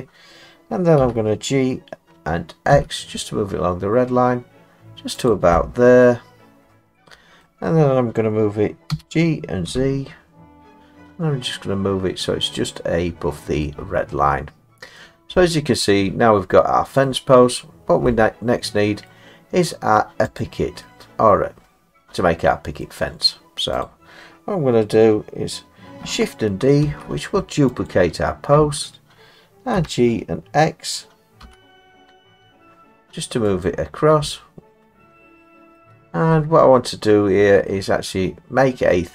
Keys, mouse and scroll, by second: 1.0 g, 2.7 x, 5.3 click, 7.4 middle click, 8.9 g, 9.7 z, 12.8 click, 13.1 middle click, 13.1 middle click, 15.0 middle click, 17.0 middle click, 17.8 middle click, 17.9 middle click, 19.1 middle click, 20.4 click, 21.9 middle click, 22.1 middle click, 22.8 middle click, 23.4 middle click, 23.9 click, 26.8 shift+d, 27.9 click, 29.8 g, 31.4 x, 33.7 click, 35.7 middle click, 37.7 middle click.